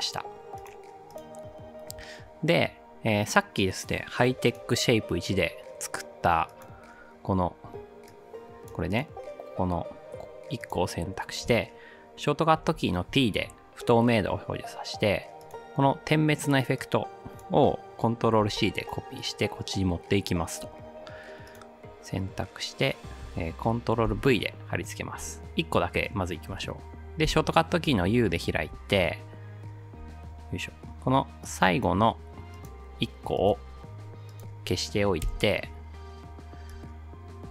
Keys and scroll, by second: 12.7 t, 18.4 ctrl+c, 24.1 ctrl+v, 27.3 u, 35.3 Delete.